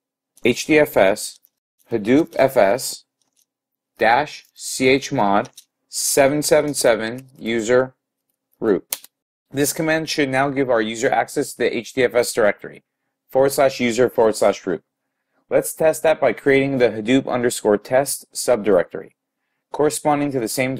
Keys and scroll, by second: 1.2-3.9 typing, 5.2-5.9 typing.